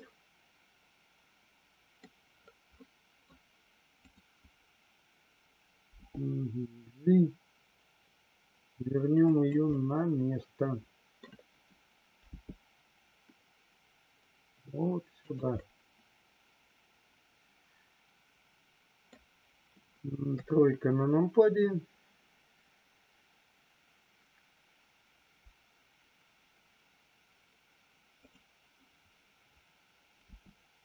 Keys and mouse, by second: 2.7-3.2 middle drag, 4.0 click, 9.2 click, 9.7-11.2 middle drag, 15.6-19.0 middle drag, 20.2 KP_3, 28.0 click, 30.3 g.